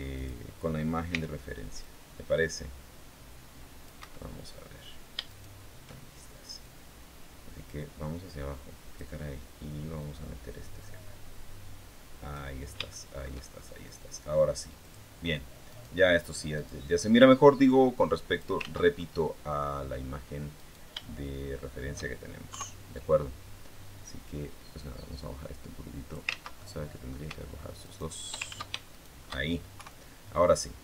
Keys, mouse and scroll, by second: 0.0 click, 0.9 c, 1.6-3.8 drag, 3.8 Escape, 5.1 shift+right click, 6.4-9.0 drag, 9.8-12.3 drag, 12.3 scroll up 2, 12.6 shift+scroll down 2, 12.7 shift+middle click, 13.3 shift+scroll up 2, 14.6 click, 15.5 right click, 16.4 right click, 17.4 click, 18.4 ctrl+z, 18.8 ctrl+scroll up 2, 18.8 ctrl+middle click, 20.4 right click, 22.3 KP_3, 23.8-26.1 drag, 26.1 ctrl+z, 26.4 ctrl+middle click, 26.6 ctrl+scroll up 1, 27.6 shift+right click, 28.2 ctrl+shift+z, 28.7 ctrl+shift+click, 29.6 KP_3.